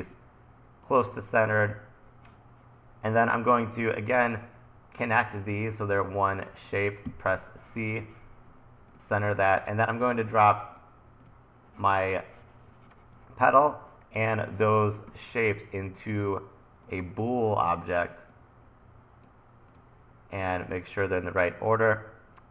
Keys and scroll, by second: 7.1 c.